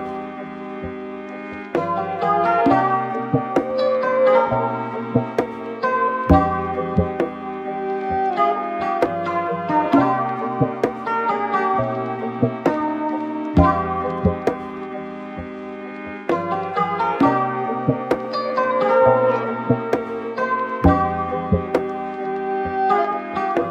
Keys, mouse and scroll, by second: 0.2-3.7 middle drag, 3.7 r, 10.9-12.8 middle drag, 12.8 click, 13.2 r, 18.7-22.2 shift+middle drag, 22.2 r.